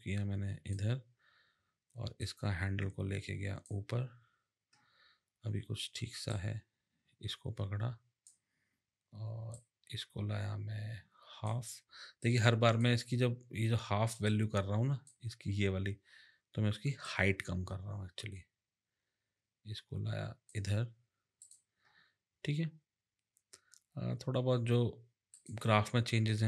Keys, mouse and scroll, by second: 2.2 click, 9.5 click, 12.2 click, 14.2 click, 17.0 click, 21.4 click, 25.3 click.